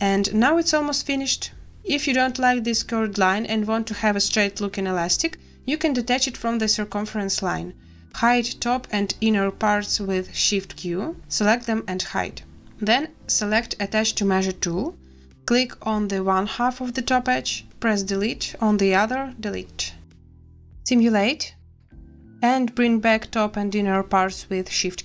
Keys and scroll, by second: 6.6 a, 8.9 shift+q, 17.3 Delete, 19.1 Delete, 20.1 space, 24.2 shift+q.